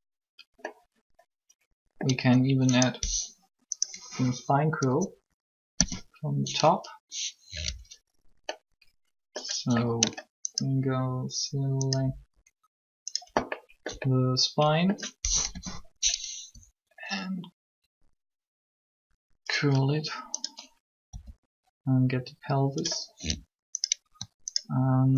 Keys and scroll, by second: 5.6 7, 15.5 7, 16.3 r, 21.1 r.